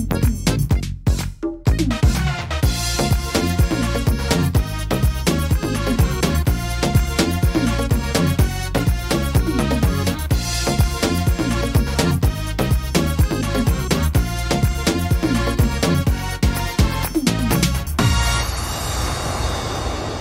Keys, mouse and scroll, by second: 1.9 middle click, 3.3 shift+middle click, 3.7 scroll up 3, 4.1 middle click, 4.4 scroll down 2, 5.1 right click, 6.0 l, 7.1 l, 7.9 click, 10.7 middle click, 10.9-11.3 scroll down 4, 11.6 middle click, 12.7 click, 14.7 scroll up 4, 15.1 middle click, 15.5 scroll up 1, 16.4 right click, 17.1 l, 17.5 middle click, 18.9 click.